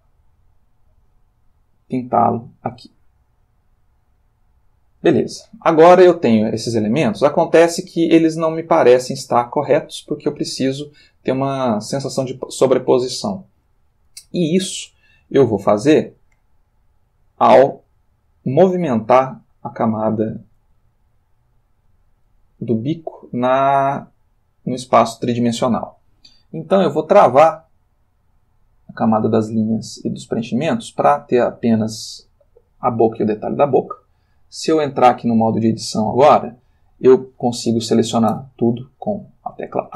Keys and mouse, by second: 1.8 click, 3.7-5.2 drag, 6.0-7.8 ctrl+middle drag, 8.1-9.6 ctrl+middle drag, 14.4-16.2 ctrl+middle drag, 16.4-19.3 ctrl+middle drag, 19.3-22.1 ctrl+shift+drag, 22.6-23.6 ctrl+drag, 23.7-25.3 ctrl+shift+middle drag, 29.1-30.5 drag, 34.9 click, 35.6 click, 38.3 a, 39.1 middle click, 39.9 ctrl+middle click.